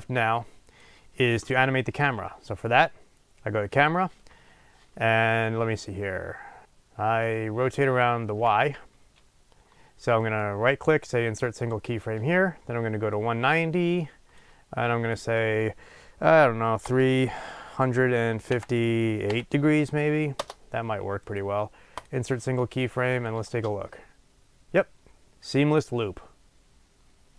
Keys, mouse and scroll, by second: 6.6-11.7 drag, 6.8 ctrl+z, 8.8 ctrl+z, 11.7-13.1 right drag, 13.1-22.0 drag, 20.5 Return, 22.0-23.1 right drag, 23.1-27.3 drag.